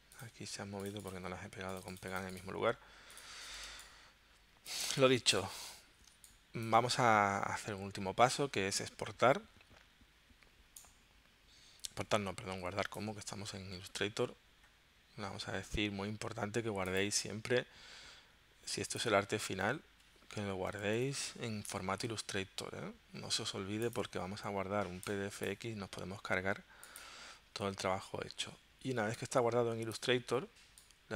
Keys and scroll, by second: 3.6 space, 5.0 v, 6.2 space, 20.6-21.9 typing.